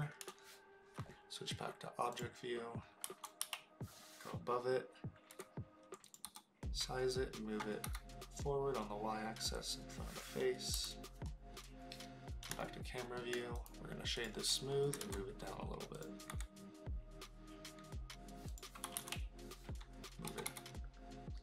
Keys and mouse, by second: 3.0 KP_7, 3.4 KP_Decimal, 5.3 s, 6.0 click, 6.2 g, 7.8 y, 9.5 click, 10.7 KP_0, 12.7-13.2 shift+middle drag, 13.7 click, 13.9 right click, 14.9 g, 15.9 click, 16.3 s, 18.5 click, 18.8 KP_7, 18.9 KP_Decimal, 20.3 g, 20.4 y.